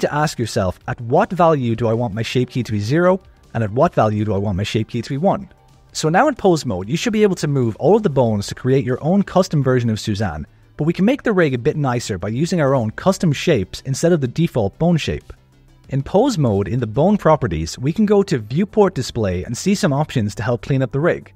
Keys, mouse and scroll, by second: 1.6 a, 1.9 alt+r, 2.1 alt+g, 2.2 alt+s, 2.7 alt+a, 3.5 click, 4.2 ctrl+s, 5.7 alt+a, 5.7 click, 5.8-11.9 typing, 6.5 click, 7.1 click, 7.9 click, 9.5 click, 10.4 click, 11.1 click, 11.8 click, 12.7 click, 12.9 g, 13.5 click, 13.7 g, 14.5 click, 14.6 g, 16.0 click, 18.9-20.0 drag, 20.3 click.